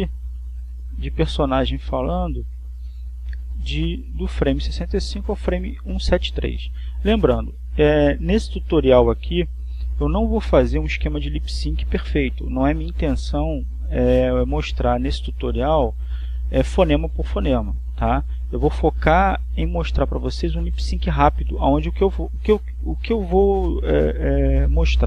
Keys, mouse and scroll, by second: 0.7-8.7 drag, 22.7-25.0 drag.